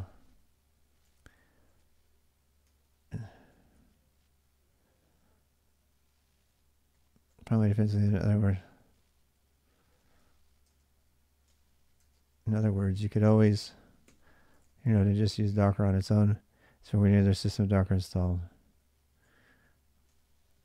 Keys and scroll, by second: 0.0-4.1 typing, 6.0-10.5 typing, 11.3 Return, 11.8-15.6 typing, 12.4 ctrl+[, 12.5 ctrl+j, 14.4 ctrl+[, 16.8-20.0 typing, 20.5 Return.